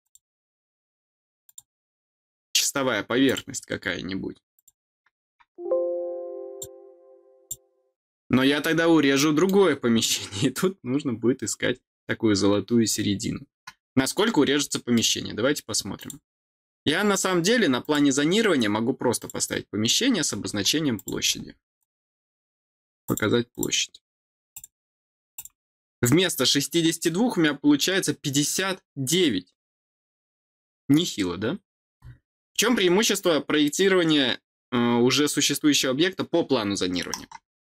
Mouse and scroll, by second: 1.4 click, 3.2 click, 4.5 click, 6.4 click, 7.3 click, 8.0-9.1 scroll down 3, 9.1 middle click, 14.3 scroll down 2, 14.6 middle click, 15.9 click, 17.7 click, 19.1 click, 20.9 click, 21.7 click, 23.0 click, 23.4 click, 24.4 click, 25.3 click, 25.8 middle click, 26.1 middle click, 26.1-28.2 scroll down 2, 32.5-33.3 scroll down 2.